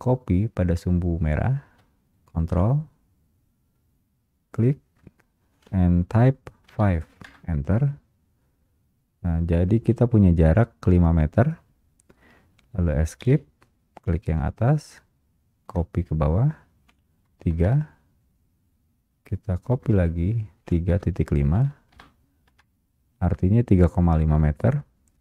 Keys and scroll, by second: 2.6 space, 7.4 Return, 13.4 Return, 13.4 Escape, 19.8 Return, 22.6 Return.